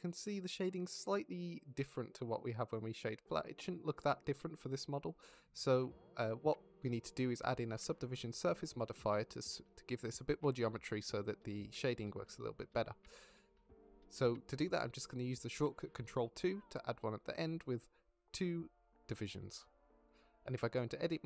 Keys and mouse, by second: 0.4 middle drag, 1.0-1.5 drag, 1.9-2.6 drag, 3.2-3.6 drag, 4.1 click, 4.4 shift+middle drag, 4.9-5.2 middle drag, 6.2 middle drag, 7.1 middle drag, 15.3 middle click, 17.5 click, 19.0 ctrl+2, 20.0 z, 20.8 click.